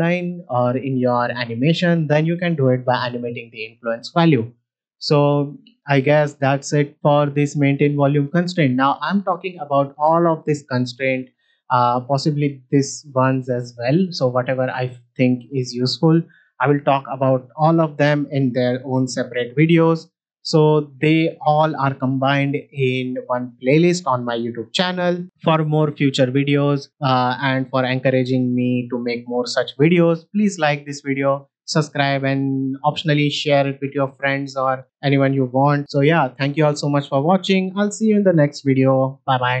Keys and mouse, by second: 2.8-4.4 drag, 4.9 click, 7.3-8.1 drag, 8.9-13.8 drag, 15.2-16.0 drag, 16.2 click.